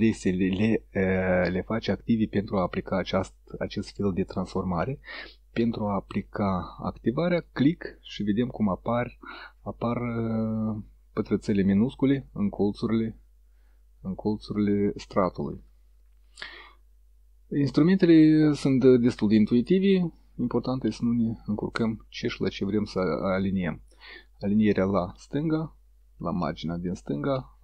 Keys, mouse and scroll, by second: 7.5 click, 11.3-12.4 middle drag, 24.8 click, 26.4-27.6 middle drag.